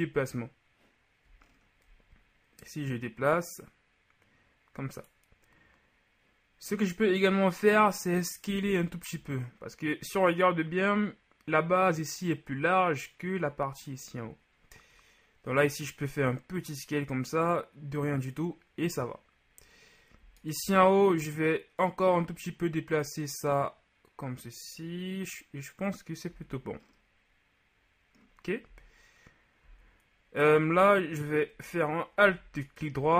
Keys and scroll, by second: 8.5 s, 26.4 z.